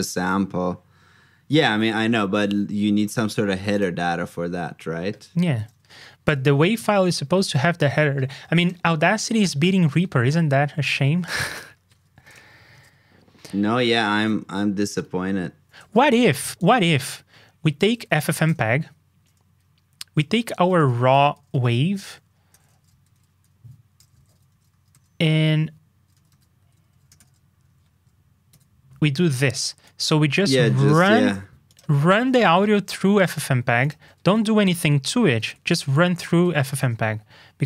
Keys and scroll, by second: 31.1 super+c, 32.4 super+v.